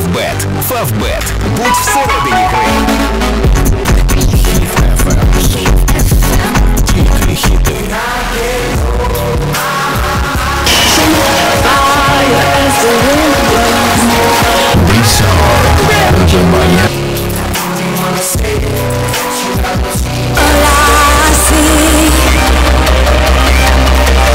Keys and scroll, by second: 8.4 Page_Down, 16.9 Page_Down.